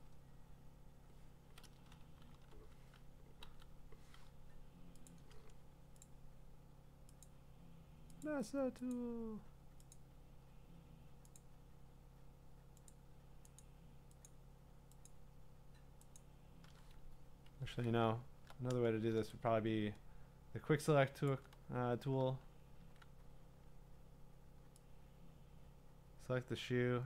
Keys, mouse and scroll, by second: 2.5-3.4 ;, 4.8 ', 5.1 click, 6.0 click, 7.2 click, 8.2 click, 8.9 click, 9.9 click, 11.4 click, 12.9 click, 13.6 click, 14.3 click, 15.1 click, 16.2 click, 17.4 Escape, 18.1-19.1 ctrl+scroll, 21.3 click, 22.8 w.